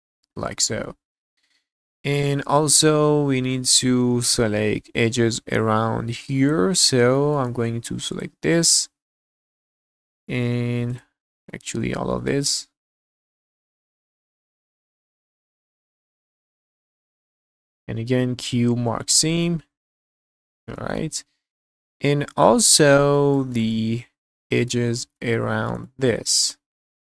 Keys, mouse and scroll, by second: 0.4 click, 0.8-3.5 middle drag, 6.8 scroll up 1, 7.1 shift+middle click, 8.1 alt+shift+click, 8.8 scroll down 2, 9.4 middle click, 10.0-10.5 scroll up 1, 10.9 alt+shift+click, 11.5 middle click, 11.9 shift+middle click, 12.3 scroll up 1, 13.3 alt+shift+click, 13.4 middle click, 13.5 shift+middle click, 13.7 middle click, 13.8 scroll up 1, 14.0 alt+shift+click, 14.2 scroll down 1, 14.2 shift+middle click, 14.3 middle click, 14.5 scroll up 1, 14.6 shift+middle click, 14.8 alt+shift+click, 14.9 scroll down 2, 15.0 middle click, 15.1 shift+middle click, 15.3 scroll up 2, 15.6 alt+shift+click, 15.9 shift+middle click, 16.0 middle click, 16.1 shift+middle click, 16.3 scroll up 1, 16.5 alt+shift+click, 16.6 scroll down 2, 16.7 middle click, 16.9 shift+middle click, 17.1 scroll up 4, 17.4 alt+shift+click, 17.6 scroll down 1, 17.8 q, 18.7 scroll down 2, 19.0 shift+middle click, 19.5-19.8 scroll down 2, 19.8 middle click, 20.2 click, 20.4 scroll down 2, 20.7 shift+middle click, 21.1-22.0 scroll up 4, 22.0 middle click, 22.8 shift+middle click, 23.3 shift+middle click, 23.7-24.7 middle drag, 25.0 scroll up 2, 25.3 shift+middle click, 25.8 middle click, 26.3 scroll up 2, 26.7 shift+middle click.